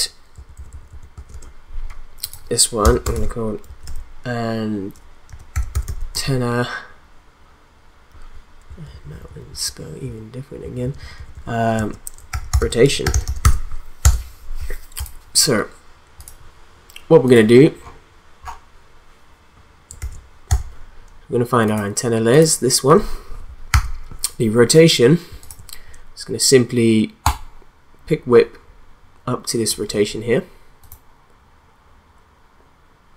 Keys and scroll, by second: 0.3 Left, 1.1 space, 1.3 Return, 3.1-6.6 typing, 8.7 Left, 10.0 BackSpace, 10.6 Right, 11.8-13.9 typing, 14.0 Return, 20.0 ctrl+a, 20.5 u, 23.7 r.